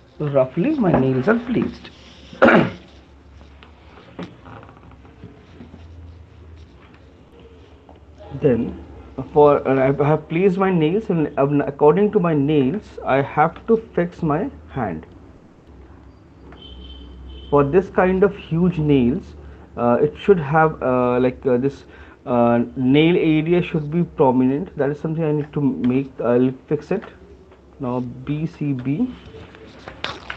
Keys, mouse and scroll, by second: 0.0 right click, 0.0 ctrl+click, 8.5 ctrl+click, 9.0 alt+click, 11.7 click, 12.5 middle click, 12.5 right click, 13.6 f, 14.9 alt+click, 16.0 click, 16.6 right click, 17.4 alt+click, 17.7 alt+click, 19.0 click, 19.3 alt+click, 20.1 alt+click, 21.1 ctrl+click, 21.4 ctrl+click, 24.8 alt+click, 26.0 q, 27.4 right click, 29.6 typing.